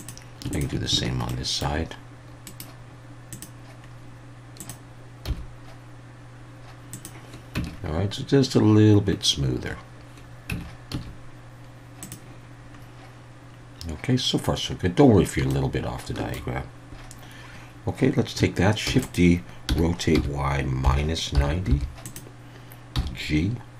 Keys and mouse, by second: 0.0 click, 1.3 shift+middle click, 2.6-3.4 right drag, 3.4 click, 4.6 click, 5.3 g, 6.9 click, 7.5 Tab, 10.5 Tab, 10.9 a, 11.4 ctrl+z, 12.0 click, 15.5 shift+middle click, 18.9-21.7 typing, 19.0 click, 22.0 click, 22.9 g.